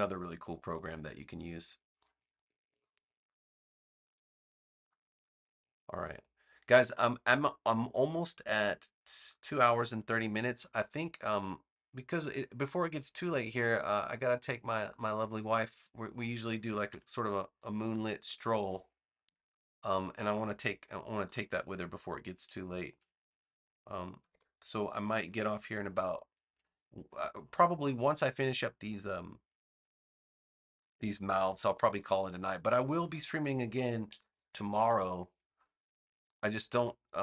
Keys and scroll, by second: 16.8 v, 19.1 a, 24.2 super+Return, 31.5 v, 34.0 super+-, 34.4 super+=.